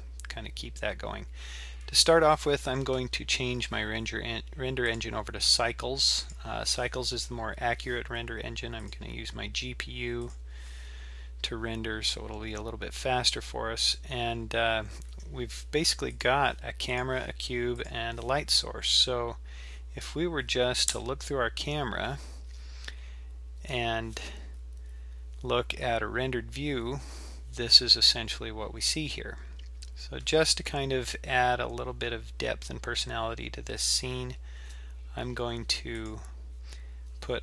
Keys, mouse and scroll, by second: 4.9-7.9 drag, 8.9-11.9 drag, 13.7-14.6 scroll up 1, 14.6-16.1 scroll down 1, 16.1 click, 16.9 click, 17.8 click, 20.9 KP_0, 23.0-24.1 scroll up 1, 24.1 z, 32.5-34.0 scroll up 1, 34.6 shift+a.